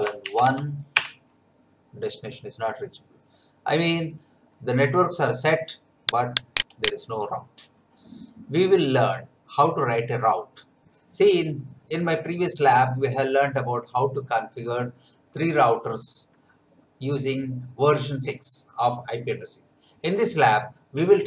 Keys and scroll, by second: 0.0-0.9 typing, 0.9 Return.